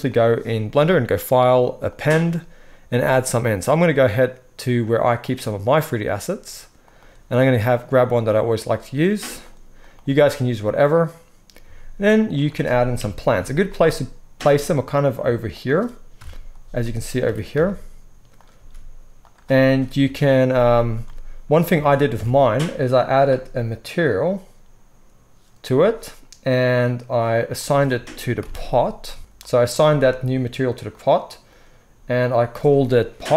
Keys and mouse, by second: 1.2-10.8 drag, 10.8-24.0 middle drag, 11.6 s, 12.9 KP_3, 14.3 g, 16.1 KP_0, 17.2 g, 18.5 s, 19.9 KP_7, 22.2 Tab, 24.0-27.6 drag, 27.6-29.2 middle drag, 28.4 ctrl+l, 29.2 ctrl+l, 29.2-33.3 drag.